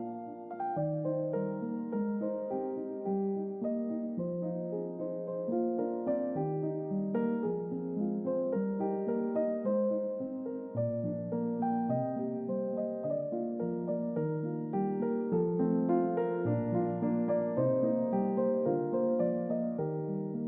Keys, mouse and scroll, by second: 1.3 click, 2.3 click, 3.0 click, 4.4-6.3 typing, 6.6 Return, 8.7 click, 13.2 click, 13.8 click, 14.6 click, 15.0 double click, 16.4 click, 17.4 click, 18.1 click, 19.0 click.